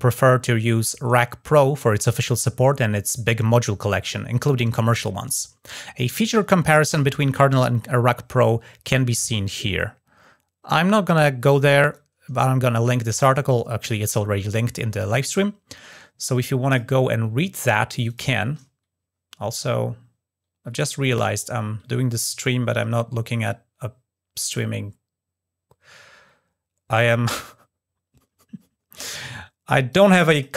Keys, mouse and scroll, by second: 16.4 click, 17.8 click, 26.7 click, 29.6 click, 30.1 click.